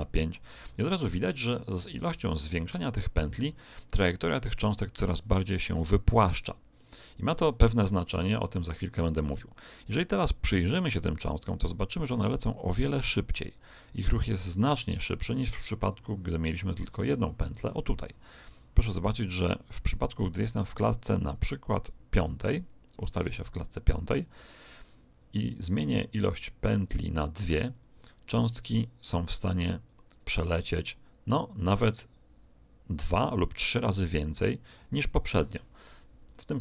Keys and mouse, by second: 10.1 click, 16.5-18.8 drag, 19.1 click, 23.4 click, 27.6 click, 36.2-36.6 drag.